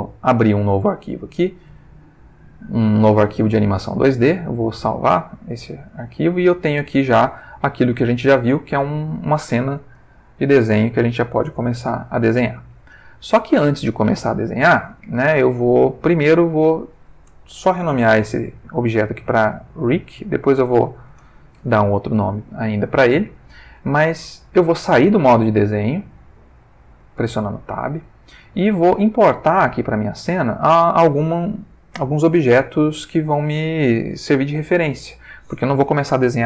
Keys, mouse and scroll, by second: 0.0 click, 3.0 click, 4.9 click, 6.4 ctrl+middle click, 8.1 ctrl+middle click, 9.9 click, 11.8 ctrl+z, 16.3 click, 17.8 shift+r, 19.1 i, 20.1 c, 20.8 k, 21.0 Return, 27.2 Tab.